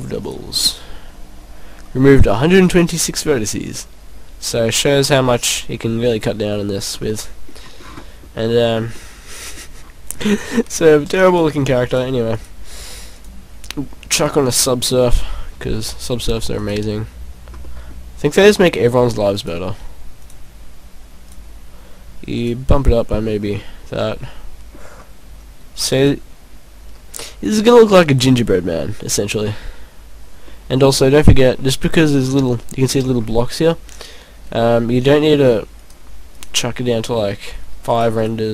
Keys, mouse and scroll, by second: 0.3 click, 2.6 click, 3.7 middle click, 5.9-6.6 scroll up 6, 6.9-7.2 scroll down 3, 7.2 middle click, 7.7-8.1 scroll down 3, 8.0 middle click, 8.5 scroll up 4, 8.9 scroll down 2, 9.1 middle click, 9.9 scroll up 1, 11.3 click, 11.4 click, 12.1 click, 12.4 click, 13.1 click, 13.3 click, 14.9 scroll down 2, 15.0 middle click, 15.9-16.3 scroll up 3, 16.6 right click, 17.7 middle click, 19.4 click, 19.7 click, 22.4 click, 23.5 scroll down 2, 23.6 middle click, 26.1 click, 27.6 click, 28.5 scroll down 1, 28.7 middle click, 29.5 scroll up 1, 31.1 scroll up 5, 31.6 middle click, 32.2-32.6 scroll up 4, 36.0 click, 36.7 click, 38.1 click, 38.3 click.